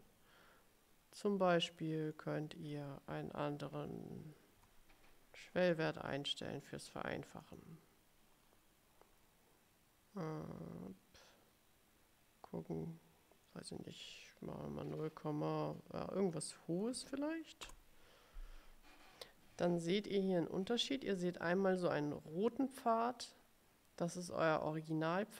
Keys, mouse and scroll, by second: 2.2 click, 4.7 3, 6.1 Return, 7.5 click, 13.5 click, 16.4 click, 17.1 2, 17.8 Return, 21.0-21.7 ctrl+scroll up 2.